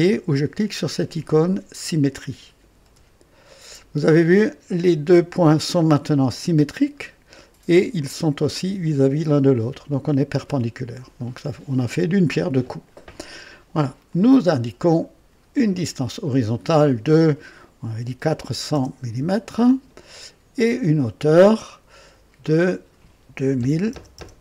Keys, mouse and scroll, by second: 2.7 s, 6.3-7.9 drag, 14.0 click, 15.6 click, 18.0 KP_4, 18.4 KP_0, 19.1 Return, 20.9 click, 22.4 click, 23.5 KP_2, 23.8 KP_0.